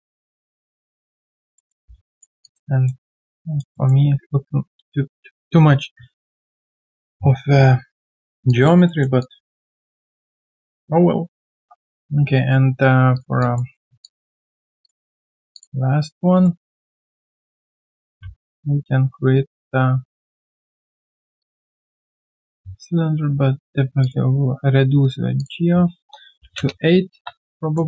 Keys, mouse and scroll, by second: 0.1 middle click, 1.5 alt+middle click, 1.8 q, 1.9 right click, 2.4 alt+click, 3.0 alt+middle click, 3.3 alt+click, 3.7 alt+middle click, 8.2 alt+right click, 8.5 alt+click, 8.9 alt+middle click, 9.2 alt+click, 10.2 alt+click, 10.9 alt+click, 11.5 alt+middle click, 13.4 alt+click, 13.7 alt+middle click, 14.0 alt+click, 15.2 alt+middle click, 18.2 alt+m, 18.3 shift+right click, 21.7 shift+right click, 26.3 typing, 26.6 Return, 27.6 alt+click.